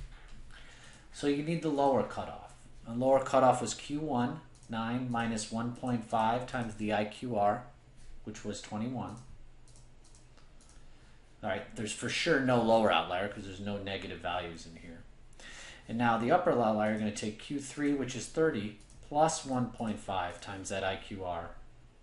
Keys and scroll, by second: 6.4-7.1 typing, 17.6-18.4 typing.